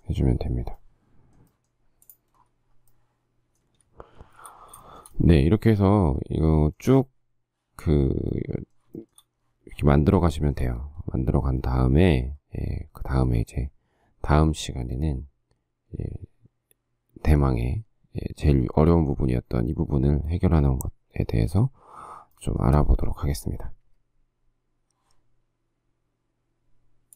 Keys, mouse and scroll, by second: 4.3 shift+a, 5.0 shift+middle click, 9.2 shift+middle click, 10.6 shift+middle click, 10.8 shift+middle click, 11.8 shift+middle click, 11.9 shift+middle click, 12.0 shift+scroll, 22.5 shift+middle click.